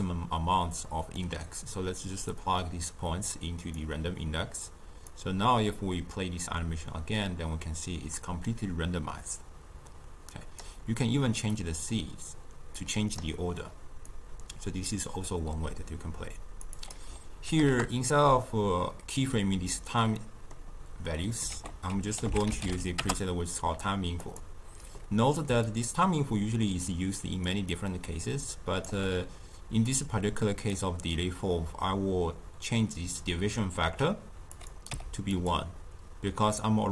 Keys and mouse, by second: 1.1-2.2 middle drag, 2.2-8.0 drag, 11.5-19.7 drag, 20.1-21.5 middle drag, 21.5 ctrl+a, 25.4 d, 25.6-27.4 drag, 27.4 d, 28.8 d, 29.8-33.0 drag, 34.5 click.